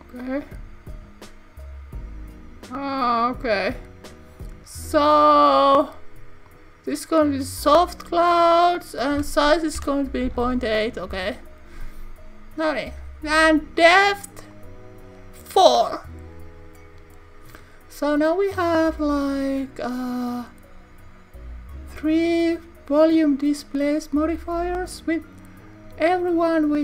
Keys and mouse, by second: 6.6-7.6 drag, 8.4-12.3 drag, 14.1 click, 14.6 click, 18.3 click.